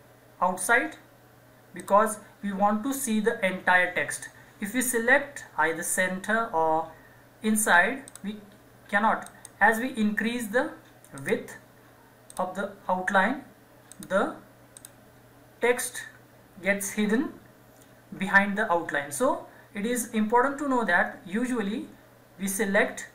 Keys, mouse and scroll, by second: 1.8 click, 8.1 click.